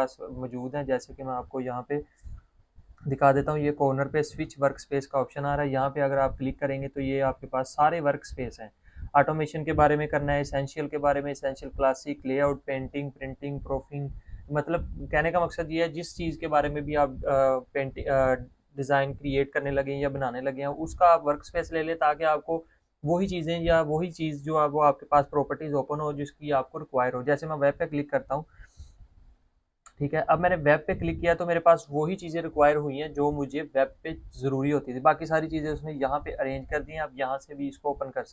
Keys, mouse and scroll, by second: 6.7 click, 28.4 click.